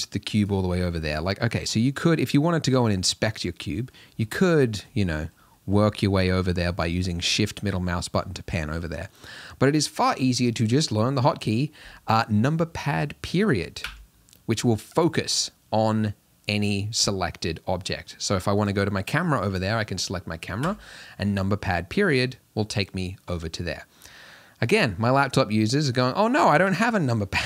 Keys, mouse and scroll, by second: 0.9-13.8 middle drag, 13.8 KP_Decimal, 17.0-18.7 middle drag, 18.7 click, 20.7 KP_Decimal, 21.7-27.4 middle drag.